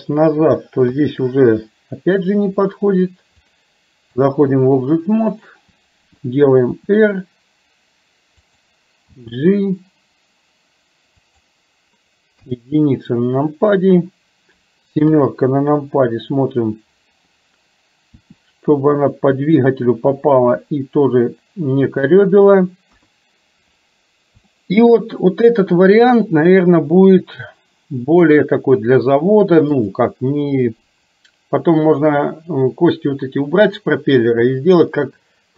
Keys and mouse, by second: 0.9 KP_3, 3.6 click, 5.3 click, 6.8 r, 9.2 g, 12.4 KP_1, 15.2 KP_7, 18.3 r, 20.4 r, 23.0 KP_1, 24.6 middle click, 28.4 click, 30.0-35.5 drag.